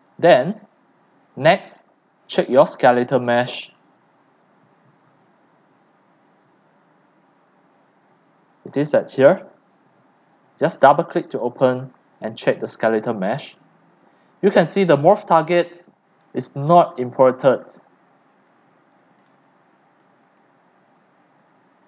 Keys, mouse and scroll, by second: 0.0-2.5 drag, 2.6-3.9 scroll down 10, 3.9-5.1 scroll down 8, 5.4-6.2 scroll, 6.7-7.7 scroll, 8.1-9.7 scroll, 9.7 click, 9.9 click, 13.7-14.3 drag, 14.4-14.7 drag, 14.9 click, 15.9 middle click, 15.9-16.3 scroll, 16.3-16.7 drag, 16.7 middle click, 16.7 scroll, 18.0-19.7 scroll up 1, 19.7-20.1 scroll up 1, 20.2-21.8 scroll.